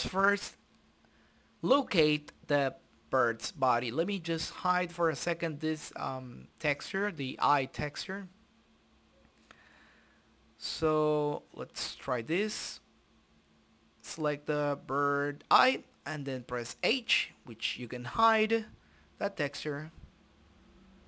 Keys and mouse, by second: 1.9-3.2 drag, 3.7 click, 5.9-7.2 drag, 7.8-9.5 drag, 9.8 click, 10.7 click, 13.3 click, 14.3 click, 15.3 click, 16.8-18.2 middle drag, 17.9 shift+z, 18.5 click, 19.4 KP_Decimal, 20.5 click.